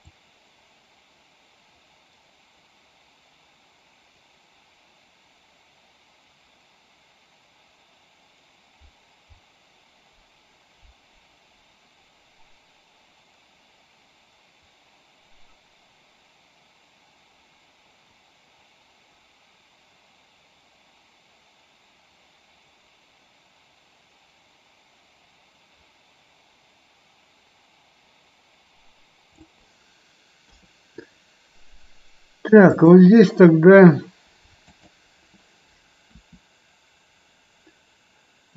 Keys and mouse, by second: 0.0-29.4 drag, 30.4 KP_3, 34.6-35.2 drag, 36.1 r.